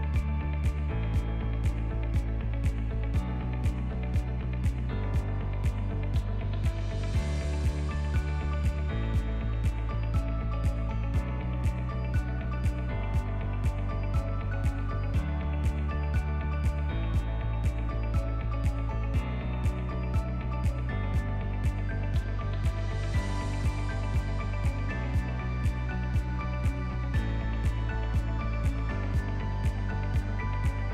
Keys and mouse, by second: 0.8 Tab, 1.3-2.8 drag, 3.6-4.5 drag, 4.9 Tab, 6.1 3, 7.6 KP_Add, 7.8 KP_Add, 7.9 KP_Add, 8.5 ctrl+KP_Add, 8.7 ctrl+KP_Add, 8.8 ctrl+KP_Add, 8.9 ctrl+KP_Add, 9.1 ctrl+KP_Add, 9.2 ctrl+KP_Add, 9.3 ctrl+KP_Add, 10.2 alt+z, 10.7 ctrl+KP_Add, 10.9 ctrl+KP_Add, 11.3 ctrl+KP_Add, 11.8 ctrl+KP_Add, 12.1 ctrl+KP_Add, 12.3 ctrl+KP_Add, 12.8 KP_1, 13.6 shift+middle click, 14.5 ctrl+middle click, 15.3 ctrl+KP_Add, 16.6 shift+middle click, 16.7 shift+click, 18.3 shift+d, 19.5 p, 21.1 alt+z, 21.3 click, 21.5 middle click, 22.5 click, 23.6 Tab, 27.6-30.9 drag.